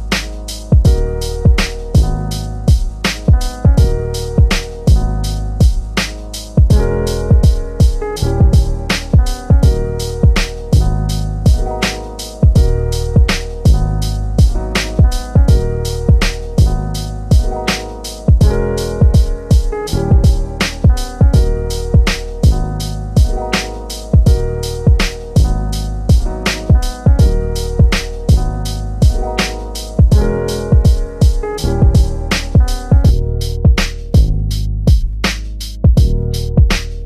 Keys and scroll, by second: 0.8 l, 1.3 3, 4.6 l, 18.4 l, 19.2 3, 28.8 3, 32.6 l, 33.3 3.